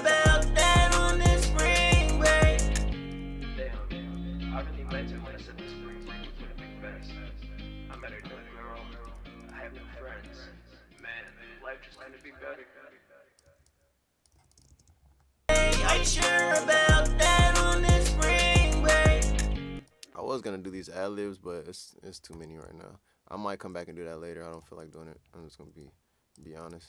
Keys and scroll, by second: 5.5-6.2 typing, 8.9-10.0 typing, 11.1-12.0 typing, 13.4-14.6 typing, 16.7-17.5 typing, 22.3 e, 26.5-26.8 typing.